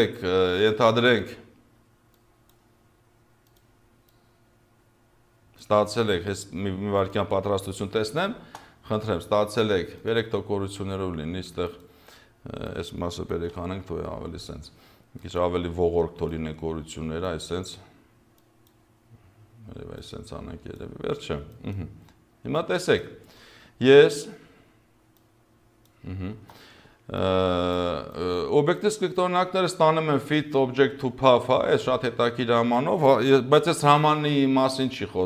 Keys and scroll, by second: 8.3 space, 13.5 Delete, 26.3 space.